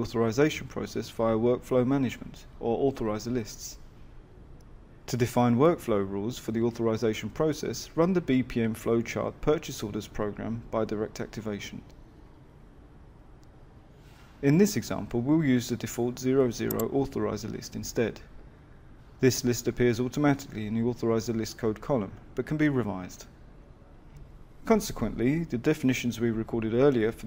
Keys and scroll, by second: 6.9 ctrl+F5, 12.2 Escape.